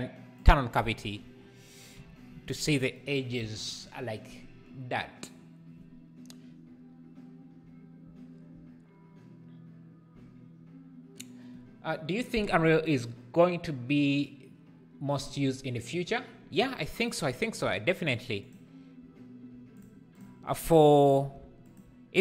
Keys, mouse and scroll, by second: 0.4-2.0 drag, 2.0 n, 20.2 click, 20.7 Tab, 21.1 2, 21.7 alt+click.